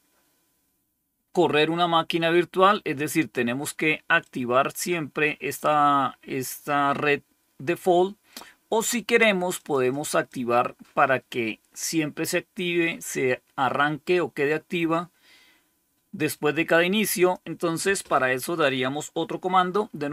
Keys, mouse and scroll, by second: 4.1-5.5 drag, 9.4-11.8 drag, 17.1 click.